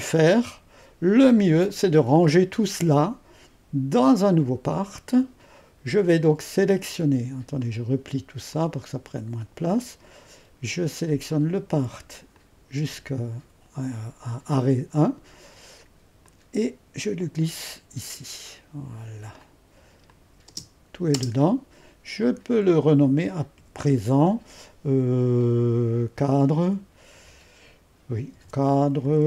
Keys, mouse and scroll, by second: 0.0-3.2 drag, 4.0-6.2 drag, 7.6-11.9 drag, 12.4-13.5 drag, 16.2-21.1 drag, 21.1 space, 22.2-23.5 drag, 23.5 F2, 28.3-29.2 typing.